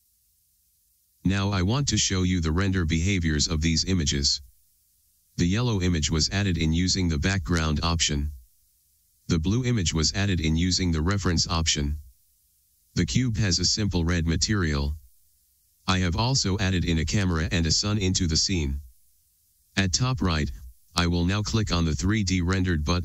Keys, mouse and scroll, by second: 9.1-22.8 middle drag, 22.8 click.